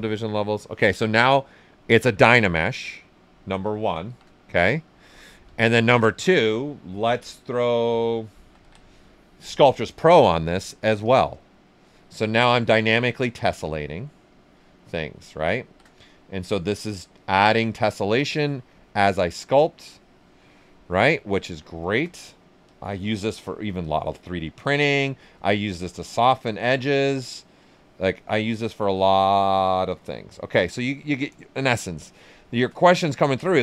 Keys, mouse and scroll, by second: 0.9 typing, 1.4 right click, 2.5 alt+right click, 4.0 shift+f, 4.3 right click, 5.6 ctrl+right click, 8.0-9.1 typing, 9.5 click, 9.9 alt+right click, 11.0 ctrl+s, 11.1 click, 15.6 shift+f, 16.0 ctrl+right click, 16.6-18.6 drag, 18.6-21.1 shift+drag, 21.1 right click, 22.2 click, 25.9-29.5 shift+drag, 31.4-32.8 shift+drag, 32.8 ctrl+right click.